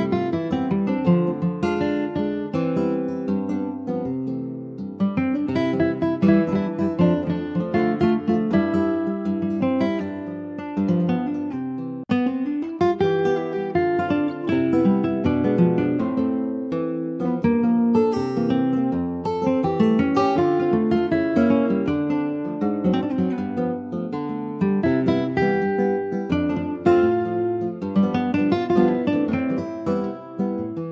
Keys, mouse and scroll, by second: 0.7-4.1 right drag, 4.1 click, 8.4 click, 8.9-9.2 scroll down 3, 9.2-10.3 middle drag, 10.3 alt+z, 10.8 click, 11.2-11.6 scroll down 2, 11.6 ctrl+s, 11.7 click, 11.9 middle click, 12.8 click, 13.0 scroll down 3, 13.2 middle click, 13.8 ctrl+s, 13.9 middle click, 14.7 ctrl+s, 15.0 shift+middle click, 15.7 ctrl+scroll up 1, 16.0 ctrl+s, 16.3 shift+middle click, 16.6 shift+scroll up 1, 16.8 click, 17.2-17.6 scroll up 2, 17.6 middle click, 18.0 scroll up 3, 18.2 ctrl+s, 18.6-20.2 middle drag, 20.2-20.6 scroll up 1, 20.6-22.3 shift+middle drag, 22.3 ctrl+s, 22.5 click, 23.0 alt+z, 23.9 alt+z, 24.2 click, 24.8 ctrl+s, 25.2-25.6 scroll down 2, 25.6 middle click, 26.2 scroll down 1, 26.3 shift+middle click, 27.2 ctrl+s, 29.4 scroll up 1, 29.6 middle click, 30.2 ctrl+s, 30.3 click, 30.7 shift+middle click.